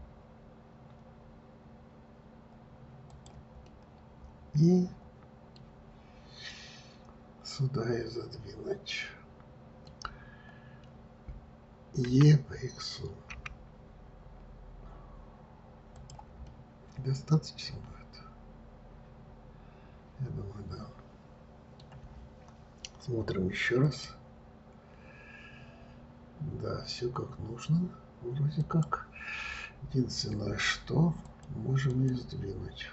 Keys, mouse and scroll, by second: 4.0-7.1 middle drag, 7.9-10.9 middle drag, 12.4 e, 16.8-19.8 middle drag, 31.6-32.9 drag.